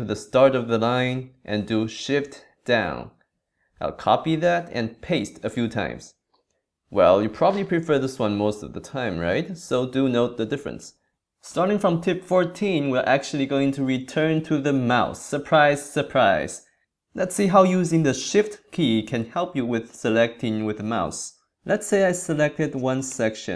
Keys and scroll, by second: 0.7 super+Left, 2.6 shift+Down.